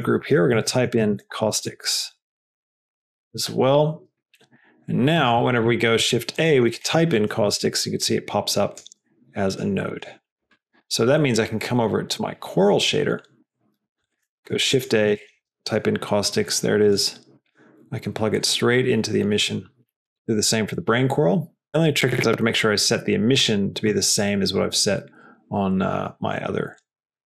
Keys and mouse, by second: 2.0 BackSpace, 4.3 middle click, 5.1 click, 5.3 middle click, 5.9 shift+a, 10.1 x, 10.5 click, 13.0 middle click, 13.4 middle click, 13.9 click, 14.3 shift+a, 18.2-19.6 drag, 26.8 click.